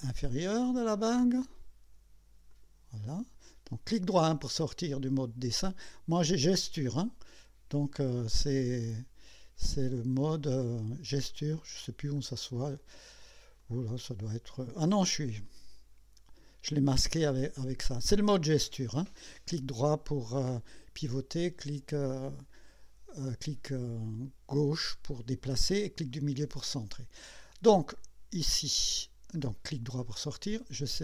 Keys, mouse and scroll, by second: 1.5 click, 2.5 click, 3.1 right click, 8.6 right click, 10.3 click, 11.3 right click, 12.2 right click, 13.6 click, 19.9-20.9 drag, 29.4 right click, 30.0 click.